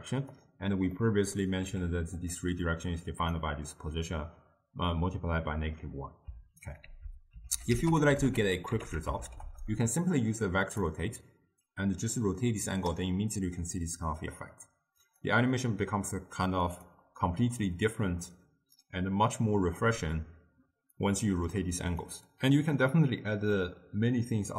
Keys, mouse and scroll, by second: 1.0-1.8 middle drag, 1.8 g, 3.3 click, 6.9 ctrl+a, 11.8-14.8 drag, 15.1-19.8 drag, 21.1-22.1 drag, 22.1-24.5 middle drag.